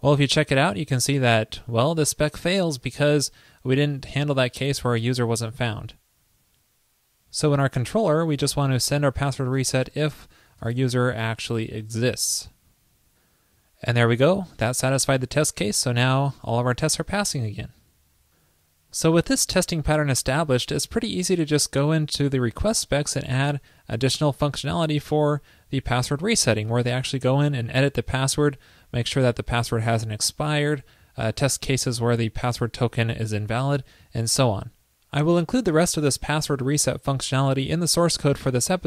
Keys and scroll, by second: 12.5 super+s.